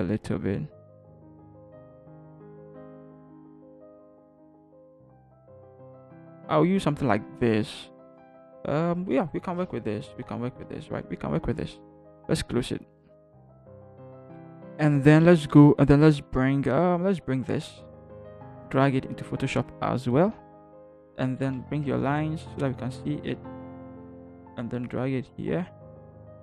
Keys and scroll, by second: 1.4 Up, 1.5 typing, 2.7 Up, 3.3 b, 4.1 x, 5.1 ctrl+0, 5.2 ctrl+-, 5.4 ctrl+0, 6.0 ctrl+=, 10.2 ctrl+-, 22.0 ctrl+h.